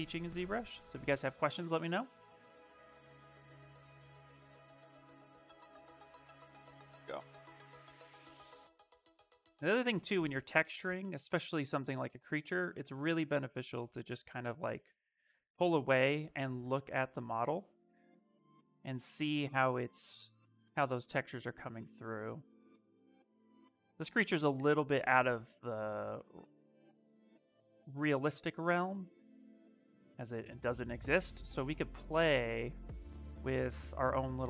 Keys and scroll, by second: 3.9 s, 25.5 s.